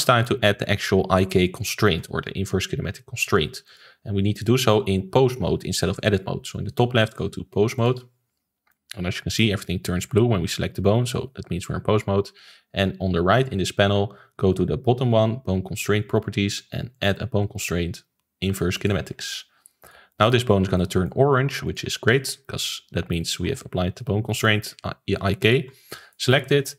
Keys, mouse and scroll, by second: 3.6 click, 7.0-8.6 drag, 8.6-11.6 middle drag, 16.9-19.9 drag, 20.0-21.6 middle drag, 21.6 click, 21.8 ctrl+s, 22.1-25.4 shift+middle drag, 25.4 click, 26.1-26.7 middle drag.